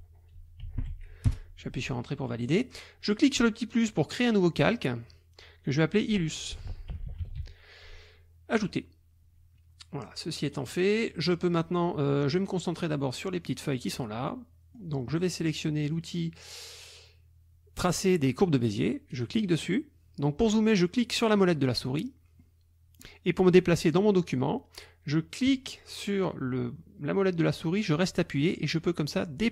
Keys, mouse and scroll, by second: 0.0-1.4 typing, 3.3 click, 6.4-7.9 typing, 8.5 click, 10.7 click, 13.3 click, 14.2 click, 19.1 click, 21.3 click, 21.9 click, 22.3 click, 22.5 middle click, 23.5-24.6 drag, 25.5-29.5 drag.